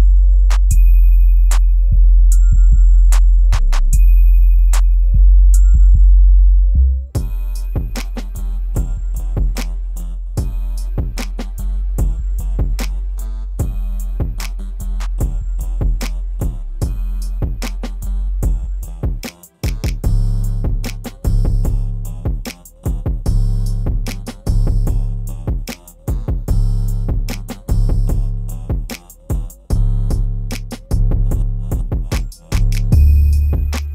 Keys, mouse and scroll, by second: 0.2-0.9 scroll down 1, 0.9 click, 1.4-2.1 scroll down 1, 3.4 scroll up 1, 4.1 click, 6.3 click, 7.9 scroll down 1, 8.6 click, 9.3-9.8 scroll down 1, 12.5-12.8 scroll up 1, 12.8 ctrl+z, 13.4 click, 14.1-15.1 scroll down 1, 16.6 click, 16.7 click, 17.5-18.9 scroll up 1, 18.9 click, 25.8 click, 27.5-29.6 ctrl+drag, 31.7-33.7 ctrl+drag, 33.7-33.9 drag.